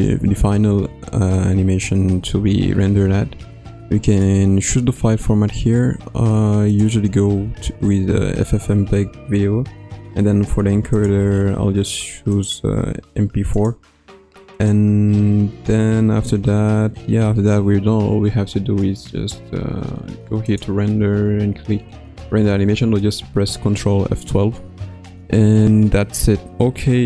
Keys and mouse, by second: 4.1-6.8 drag, 10.9 drag, 12.3-13.6 drag, 14.5 click, 20.4-22.6 drag.